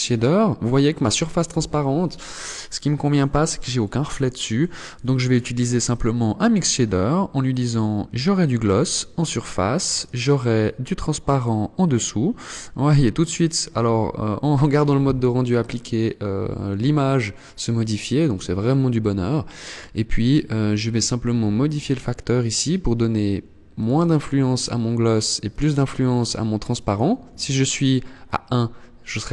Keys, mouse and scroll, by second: 3.7 click, 6.5 click, 9.1 click, 13.1 scroll up 2, 13.9 scroll up 1, 15.0 shift+middle click, 17.6 scroll up 1, 20.9 click, 22.7 click, 23.5 click, 24.5 click, 25.3 click, 26.1 click.